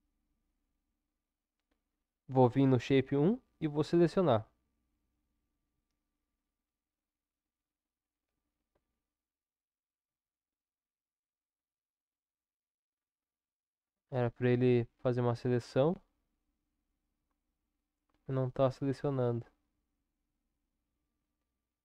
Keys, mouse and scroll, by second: 4.4-8.7 drag, 8.7 Tab, 10.0 Tab, 11.5 Tab, 18.2-20.9 drag, 20.9 Tab.